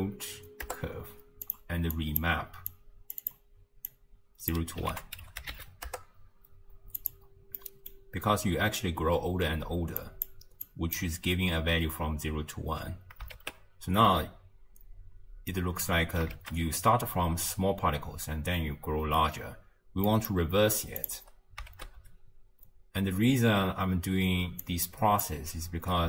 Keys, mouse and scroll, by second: 1.9 click, 2.7 drag, 3.9 drag, 4.9 ctrl+a, 7.6 middle click, 8.0-10.0 scroll up 2, 10.0 click, 10.7 click, 13.4 shift+space, 14.1 space, 16.1 space, 16.7 space, 18.9 space, 20.1 middle click, 20.4-21.0 scroll up 1, 21.0 click, 21.8 shift+space, 23.3 space, 24.7 click.